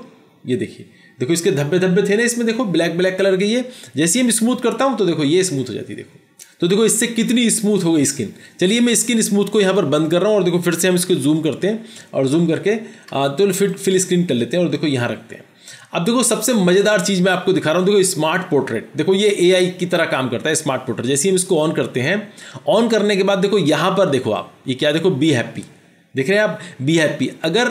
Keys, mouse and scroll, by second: 11.2 ctrl+=, 11.6 ctrl+=, 12.0 ctrl+=.